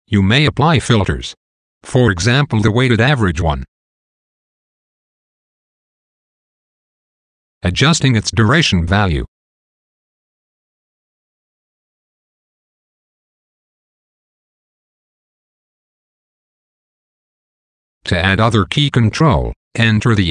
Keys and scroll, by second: 5.5 t, 9.0 t, 19.2 shift+super+k.